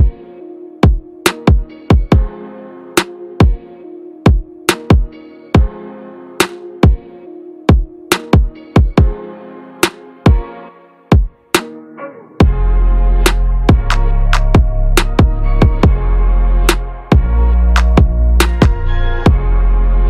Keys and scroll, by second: 0.7 ctrl+a, 15.9 ctrl+=, 16.6 ctrl+space.